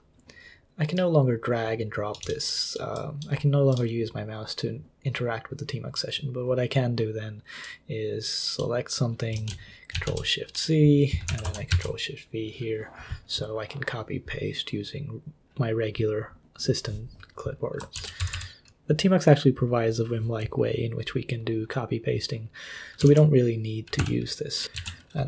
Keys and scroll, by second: 9.9 ctrl+c, 11.3 i, 11.7 ctrl+v, 18.0 ctrl+c, 18.2 d, 18.3 d, 23.0 super+l, 24.0 super+h, 24.5-25.2 typing.